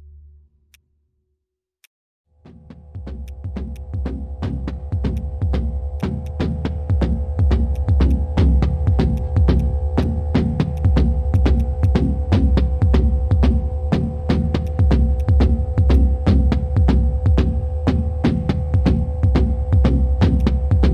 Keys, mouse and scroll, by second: 14.6 ctrl+shift+click, 15.2 ctrl+shift+click, 15.9 ctrl+shift+click, 18.2 ctrl+shift+space.